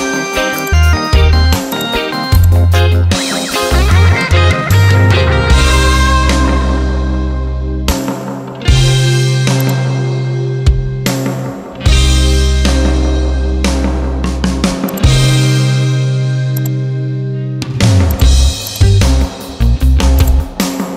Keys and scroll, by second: 12.0 Return.